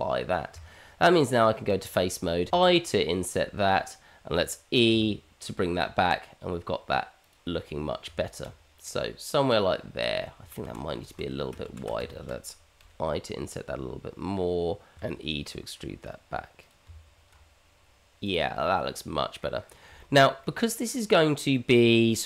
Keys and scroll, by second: 0.5 Tab, 2.5 i, 4.9 e, 8.0 Tab, 10.4 ctrl+z, 11.1 ctrl+z, 11.8 ctrl+z, 12.3 ctrl+z, 12.8 i, 16.1 e, 16.8 Tab.